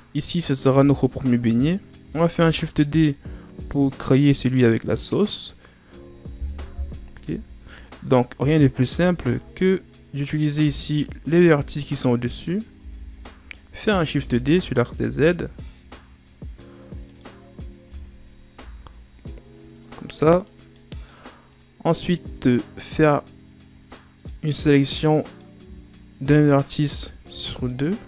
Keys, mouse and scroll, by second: 0.6 Tab, 1.5-1.9 scroll down 1, 2.2 shift+d, 5.0 click, 6.4 KP_1, 7.1 Tab, 8.1 right click, 8.8 z, 10.1 right click, 10.5 b, 12.7 z, 13.2 middle click, 14.0 shift+d, 18.5 o, 19.1-20.7 drag, 20.7 middle click, 21.1-23.2 scroll up 2, 24.2-25.2 middle drag, 25.2 right click, 26.4-27.6 middle drag, 27.6 shift+right click.